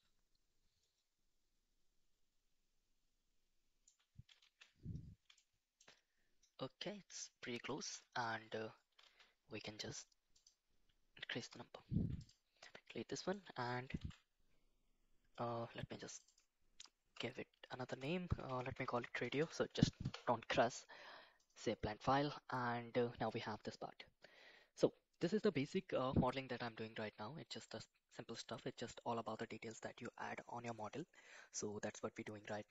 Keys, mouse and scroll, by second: 4.4 shift+z, 5.3 shift+middle click, 7.8 shift+z, 9.1 shift+z, 10.4 click, 11.5 click, 12.0 x, 12.9-13.3 middle drag, 14.0 ctrl+s, 32.5 middle click.